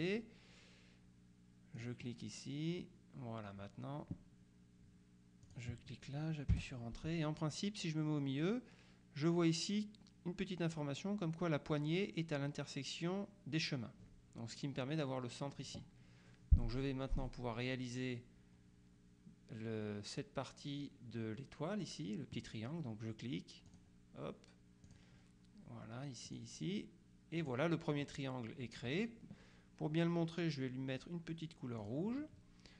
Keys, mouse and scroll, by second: 1.8 click, 5.6 click, 6.6 Return, 23.8 click, 25.0 click, 26.4 click, 27.5 click, 31.9 click.